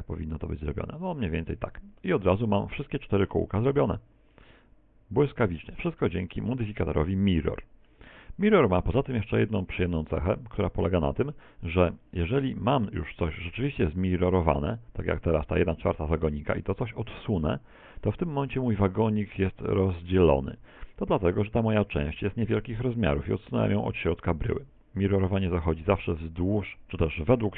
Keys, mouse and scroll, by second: 1.1 click, 1.5 Tab, 2.0 middle click, 3.3 middle click, 4.3 middle click, 5.6 shift+middle click, 6.2-6.7 scroll down 4, 6.7 shift+middle click, 7.1 middle click, 8.1 middle click, 9.1 middle click, 9.8 middle click, 10.3 middle click, 12.9 right click, 13.2 Tab, 13.9 a, 14.1 a, 14.7 middle click, 15.4 middle click, 17.1 click, 20.9 middle click, 25.3 KP_1.